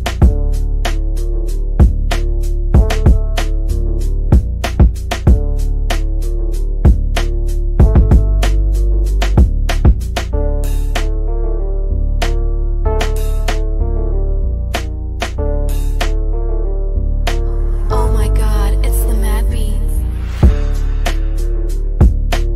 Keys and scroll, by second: 11.1 Delete, 12.7 c, 15.2 shift+F2, 15.5 Escape.